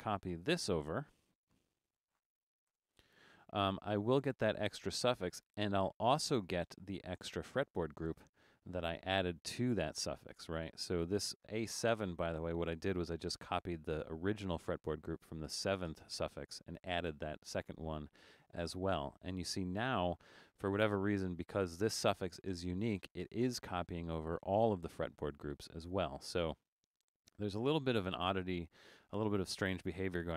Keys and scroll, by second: 2.7 super+v, 8.2 Return, 26.9 Escape, 28.2 super+z.